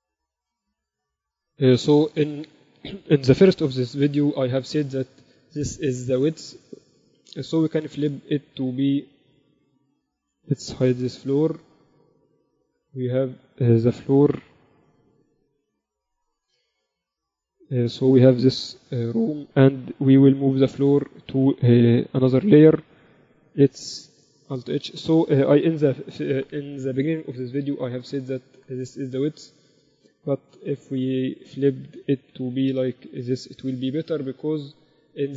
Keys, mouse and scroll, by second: 0.0 Tab, 1.1 KP_7, 7.7 r, 12.4 h, 13.3-15.1 right drag, 15.1 h, 15.8 alt+h, 16.5 a, 17.1 KP_2, 17.3 KP_2, 17.4 z, 18.4 click, 18.8-21.4 right drag, 19.6 h, 20.8 m, 21.4 click, 24.9 alt+h, 25.4-27.0 drag, 26.3 KP_7, 26.6 z, 30.5 r.